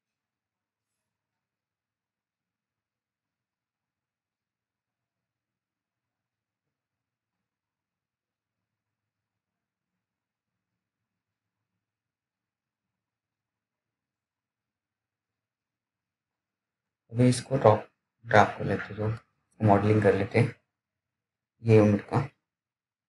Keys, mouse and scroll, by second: 0.5 right click, 1.0 click, 1.0 click, 2.2 right click, 2.9 click, 5.4-5.8 scroll down 1, 6.4 click, 11.2 F3, 14.0-15.4 scroll up 1, 15.4 click, 22.3 click.